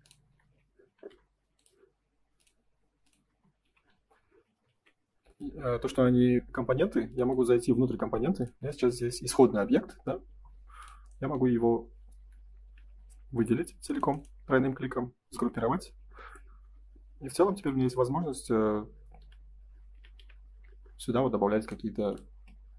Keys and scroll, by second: 0.3 F3, 0.9 ctrl+s, 3.2 space, 3.6 F4, 4.1 Escape, 4.7 ctrl+s, 12.1 F3, 12.7 F4, 15.3 g, 17.5 r, 19.1 F3, 20.1 F4, 22.3 space.